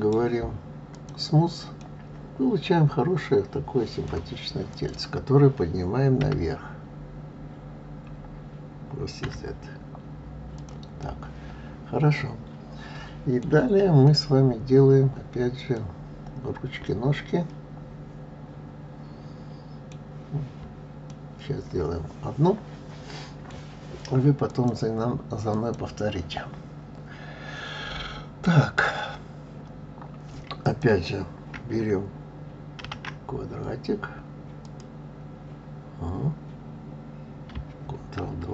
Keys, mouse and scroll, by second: 1.1 right click, 1.8-4.7 middle drag, 4.7 click, 6.2 g, 11.0-14.0 middle drag, 15.7-18.8 middle drag, 20.1 scroll down 4, 20.6 scroll up 2, 21.1-24.1 middle drag, 30.6 click, 32.8 shift+a, 38.2 ctrl+2.